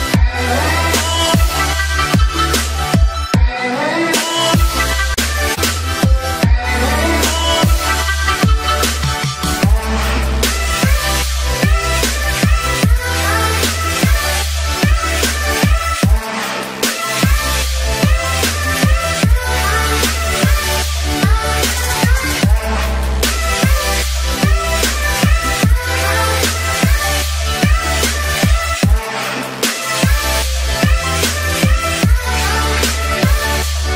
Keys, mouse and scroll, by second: 0.9 space, 1.0-4.0 drag, 4.0 ctrl+z, 5.0 click, 7.0 space, 7.3-13.7 alt+drag, 15.2 click, 19.4 l, 19.8-31.6 drag, 32.6-33.9 typing.